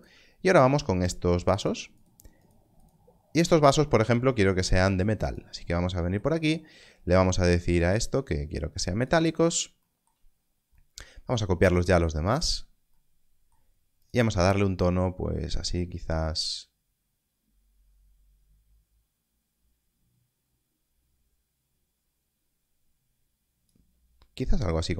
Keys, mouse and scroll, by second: 0.5 shift+click, 5.2 click, 7.8 click, 11.6 click.